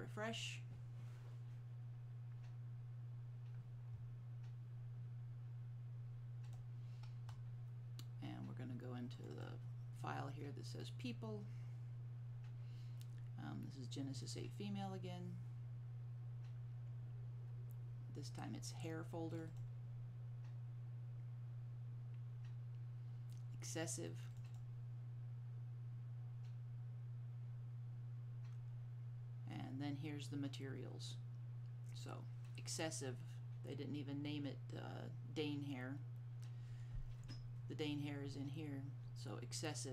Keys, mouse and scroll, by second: 6.6 click, 9.3 click, 9.5 double click, 14.3 click, 14.4 double click, 19.4 click, 24.4 click, 24.6 double click.